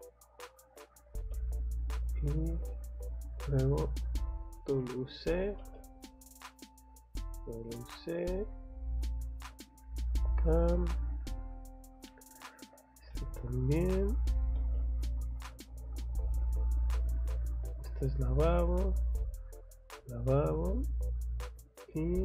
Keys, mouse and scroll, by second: 0.7 click, 1.3 space, 1.9 click, 2.1 scroll down 1, 2.8-3.4 scroll up 1, 3.4-4.5 scroll up 1, 4.5 click, 4.8 Escape, 5.1 click, 5.3 click, 6.1 click, 7.1 click, 7.4 scroll down 2, 8.0 scroll up 2, 9.0 click, 10.1 click, 10.3 scroll down 2, 11.0 scroll up 2, 12.2 click, 12.5 Escape, 12.6 scroll down 2, 13.1 middle click, 13.8-14.3 scroll up 1, 14.3 click, 15.5 click, 16.4 scroll up 1, 17.8 click, 19.3 click, 19.8 scroll down 1, 20.5 scroll up 1.